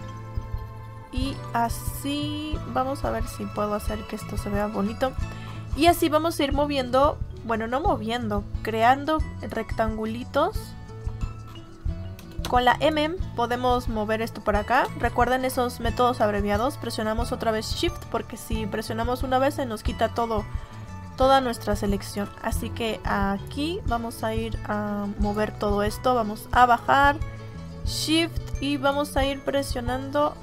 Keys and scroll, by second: 12.3 space.